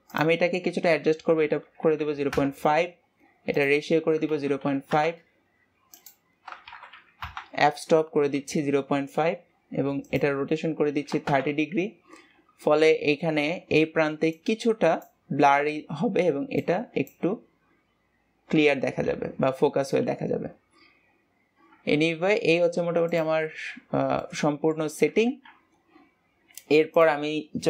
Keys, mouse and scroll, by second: 0.6-3.6 drag, 4.0-9.4 drag, 10.5-13.6 drag, 22.5 ctrl+s, 23.6 click, 24.4 scroll down 4, 24.6-26.0 middle drag, 26.0-27.0 scroll down 2, 27.0-27.6 scroll down 1.